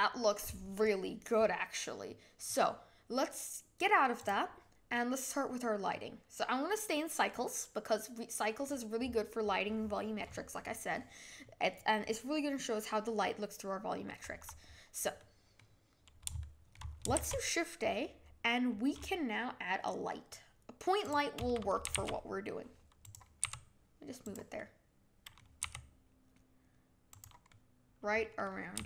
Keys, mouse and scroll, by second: 4.1 click, 5.8-9.0 middle drag, 13.2-17.1 middle drag, 17.1 shift+a, 21.9 g, 23.4 g, 24.5-25.6 middle drag, 25.6 g, 27.4-28.7 middle drag, 28.7 g.